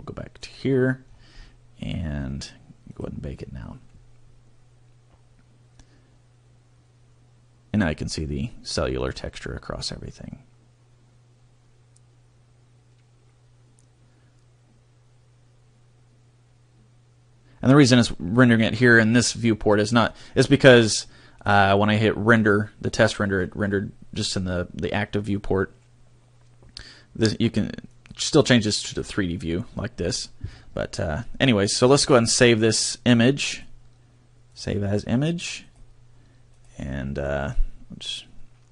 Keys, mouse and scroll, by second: 34.3 click.